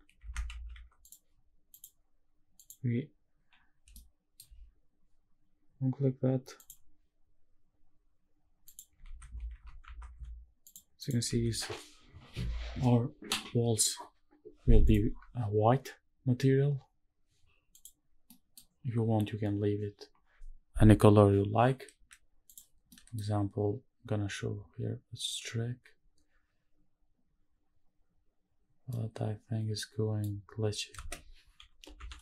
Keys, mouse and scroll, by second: 0.3 shift+`, 1.7-2.9 drag, 3.9 shift+middle click, 6.7 click, 8.7 click, 9.1 ctrl+s, 9.7 shift+`, 11.0 click, 11.3 ctrl+s, 14.8 click, 16.5 scroll down 1, 18.0 click, 18.0-19.0 scroll down 1, 19.0 middle click, 19.0-22.1 scroll down 1, 22.5 click, 23.6-24.4 scroll down 1, 24.4 middle click, 24.4-27.4 scroll down 1, 28.9-30.3 middle drag, 30.9 space.